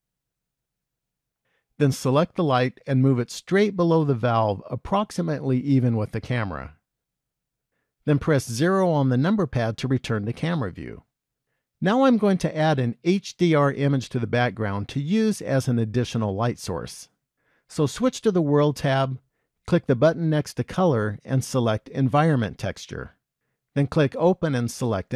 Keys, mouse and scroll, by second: 2.9 click, 3.6 g, 8.6 KP_0, 18.6 click, 20.4 click, 24.6 click.